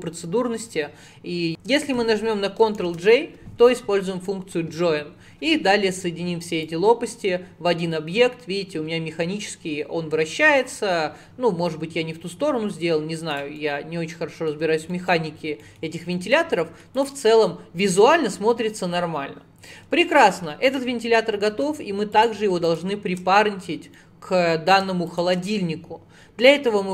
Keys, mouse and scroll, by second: 1.5 ctrl+p, 2.8 ctrl+j, 6.7 click, 13.6-14.6 middle drag, 14.6-15.0 scroll down 4, 15.0 middle click, 15.2 scroll down 4, 15.6 middle click, 16.4-17.0 scroll down 2, 17.0 click, 17.5-19.8 middle drag, 19.8-20.2 scroll up 5, 20.7 click, 22.2 shift+click, 22.7 shift+click, 23.5-24.0 scroll down 5, 24.0-25.1 middle drag, 25.1 shift+click, 26.7-26.9 middle drag.